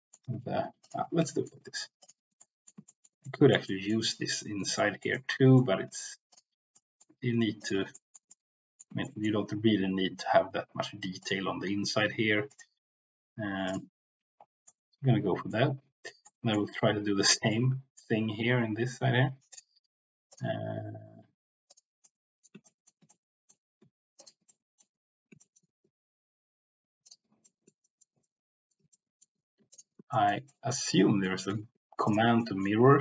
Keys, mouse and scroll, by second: 0.4 ctrl+z, 0.8 ctrl+click, 1.3 shift+middle click, 2.3 middle click, 2.9 shift+middle click, 3.3 middle click, 3.6 middle click, 4.6 shift+middle click, 5.3 middle click, 6.7 middle click, 7.9 shift+middle click, 8.3 middle click, 9.1 shift+middle click, 12.5-13.7 right drag, 14.6 middle click, 16.1 middle click, 17.5 middle click, 21.6 ctrl+click, 22.1 middle click, 22.6 shift+middle click, 23.1 middle click, 24.4 middle click, 25.5 shift+middle click, 27.0 ctrl+click, 27.4 shift+middle click, 27.8 shift+middle click, 28.1 middle click, 28.9 shift+middle click, 30.2 shift+middle click, 31.2 shift+middle click, 32.0 ctrl+click, 32.4 middle click, 32.9 ctrl+z.